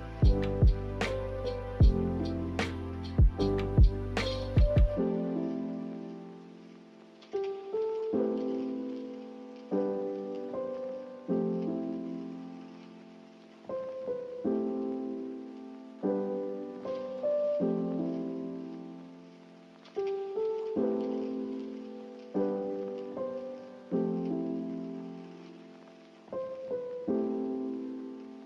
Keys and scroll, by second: 19.0 a, 24.1 n, 25.7 a.